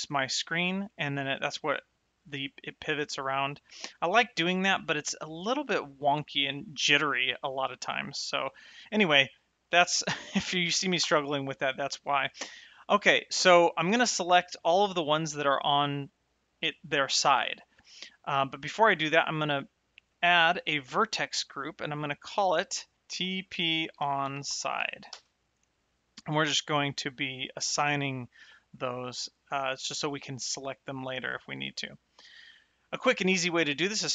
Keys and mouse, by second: 1.0 middle click, 11.9 n, 12.7 shift+middle click, 19.5 click, 21.9 click, 23.1-24.9 typing, 25.1 KP_Enter.